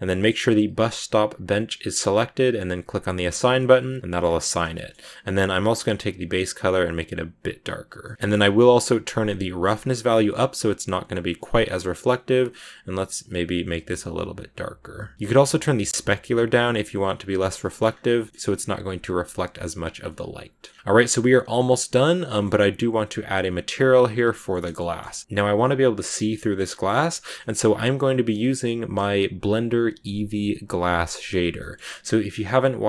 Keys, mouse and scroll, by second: 3.0 click, 3.5 Tab, 3.6 scroll down 2, 3.7 middle click, 4.1-4.6 scroll up 3, 4.7 shift+middle click, 4.9 scroll up 1, 6.9 click, 7.9 middle click, 8.1 click, 9.7 scroll down 8, 9.9-13.1 drag, 15.1-17.3 drag, 17.3 scroll down 1, 17.4 middle click, 17.7 scroll up 1, 17.9 middle click, 18.2 scroll up 1, 18.3-19.6 middle drag, 19.6 click, 19.9 scroll down 1, 20.0 middle click, 20.5 scroll down 3, 20.8-22.0 middle drag, 22.0-23.2 scroll up 3, 22.1 middle click, 23.2 right click, 24.2-32.8 shift+middle drag.